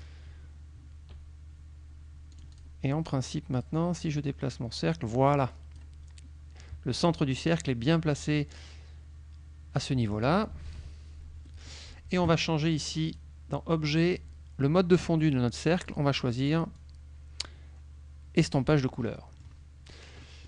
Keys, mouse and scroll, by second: 2.4 click, 3.6 click, 4.0-6.0 drag, 10.7 ctrl+KP_5, 11.5 click, 11.6 middle click, 13.2 click, 14.2 click, 16.0 click, 16.9-18.9 drag, 19.2 middle click, 20.3 middle click.